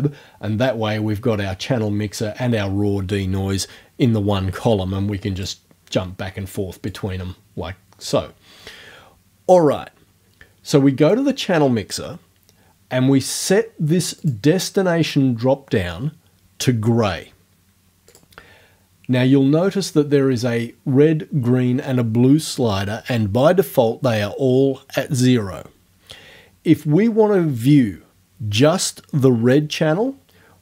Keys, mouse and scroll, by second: 5.4 click, 6.9 click, 8.0 click, 11.1 click, 14.2 click, 18.1 click.